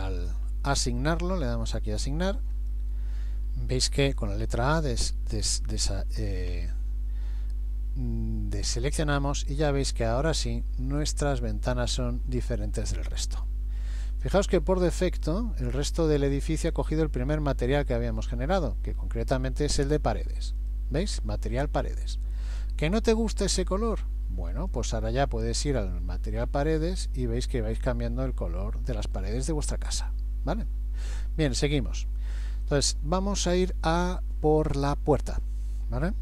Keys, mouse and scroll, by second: 2.5 click, 4.5-6.7 typing, 9.1 middle click, 14.0-14.6 scroll up 1, 14.9-15.8 scroll down 1, 16.8 scroll up 2, 20.6 click, 24.5 click, 31.5-32.0 scroll up 1, 32.7 shift+middle click.